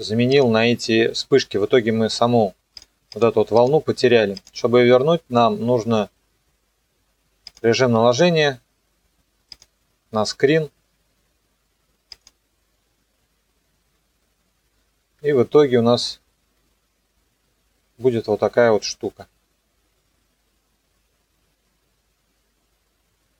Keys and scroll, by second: 15.2 KP_0.